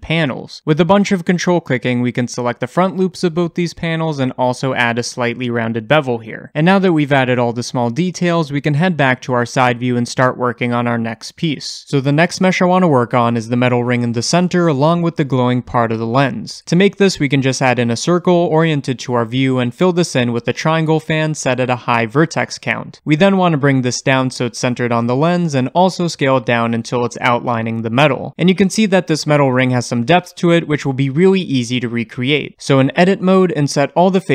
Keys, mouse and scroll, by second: 0.1 shift+middle click, 0.6 ctrl+click, 1.1 shift+middle click, 1.6 ctrl+click, 1.7 middle click, 2.3 shift+click, 2.5 ctrl+click, 3.8-7.3 middle drag, 4.4 ctrl+b, 7.3 Tab, 8.2-9.5 shift+middle drag, 9.5 click, 10.0-11.5 shift+middle drag, 11.5-23.3 drag, 18.2 shift+a, 23.3-25.4 shift+middle drag, 24.1 g, 25.4 click, 27.4 s, 30.6-32.9 scroll up 1, 32.9 Tab, 33.7 i.